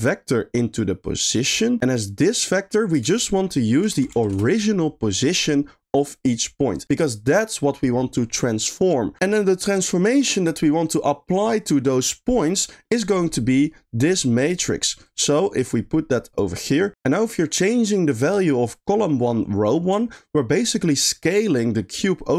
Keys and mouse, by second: 0.2-1.4 drag, 2.7 middle click, 3.0 shift+a, 6.8 drag, 12.8 middle click, 13.3-14.3 drag, 15.1-16.4 drag, 20.3-22.3 shift+drag.